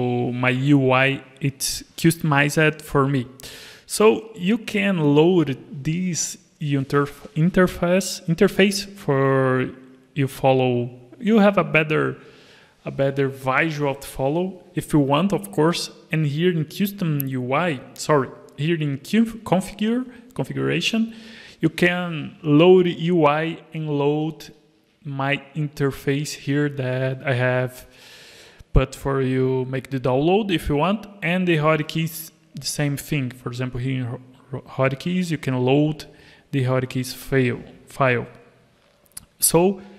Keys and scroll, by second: 24.7 alt+a.